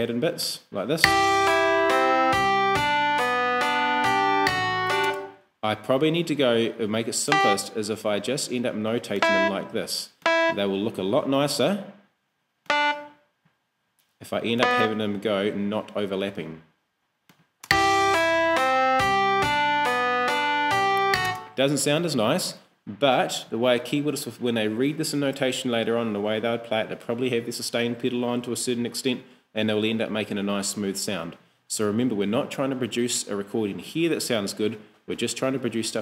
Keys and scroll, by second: 1.0 space, 5.1 space, 17.7 space, 21.3 space.